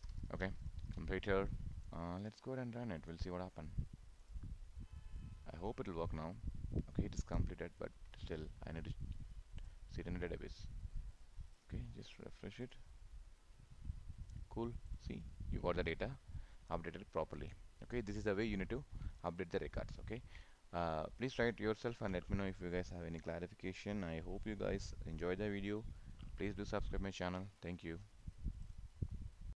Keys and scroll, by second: 0.8 ctrl+s.